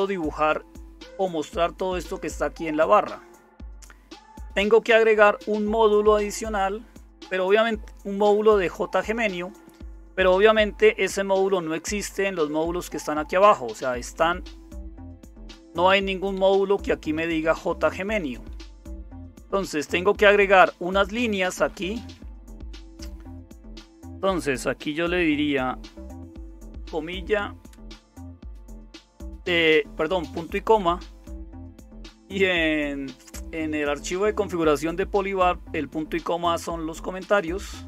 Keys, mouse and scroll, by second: 0.0-19.2 typing, 8.9 Down, 9.2 Down, 9.3 Down, 9.5 Down, 9.7 Down, 10.0 Down, 10.3 Down, 11.0 Page_Down, 11.6 Page_Down, 12.4 Page_Up, 14.1 Page_Down, 14.8 Page_Down, 15.4 Page_Down, 16.3 Page_Down, 16.8 Page_Down, 17.9-18.5 Page_Down, 18.5 Page_Up, 18.7 Page_Up, 19.0 Page_Up, 19.2 Page_Up, 19.4 Page_Up, 19.9-20.7 Page_Up, 20.7 Page_Down, 20.8 Page_Down, 21.0 Page_Down, 21.2 Page_Down, 21.3 Page_Down, 23.5 Page_Down, 23.5 Return, 23.8 Return, 26.8 Return, 27.7 ;, 27.9 space, 28.1 space, 30.3 space, 30.6 Left, 30.8 Left, 37.2 space, 37.7 space.